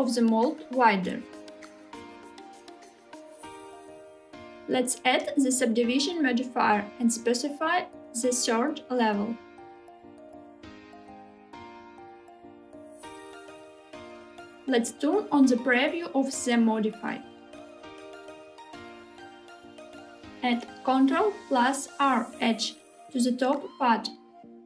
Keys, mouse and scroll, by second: 3.1 click, 4.1 middle click, 4.5-8.9 drag, 10.5 click, 11.8 click, 16.4 click, 18.5-20.0 middle drag, 20.1 click, 22.3 ctrl+r.